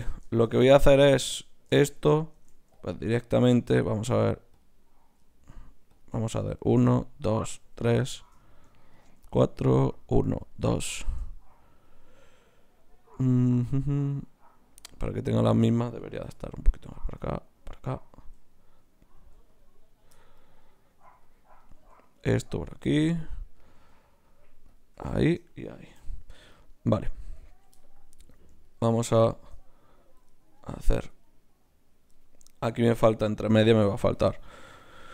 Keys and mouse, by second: 2.3 ctrl+Tab, 3.0 click, 3.6-5.5 right drag, 4.5-14.2 drag, 16.3 g, 16.9-20.1 right drag, 17.1 g, 18.2 g, 19.2 g, 20.1 click, 20.9 g, 21.7 g, 22.5 g, 23.7 g, 24.7 click, 24.7 right click, 26.0 f, 26.2 click, 26.2-31.2 right drag, 31.2-35.1 middle drag.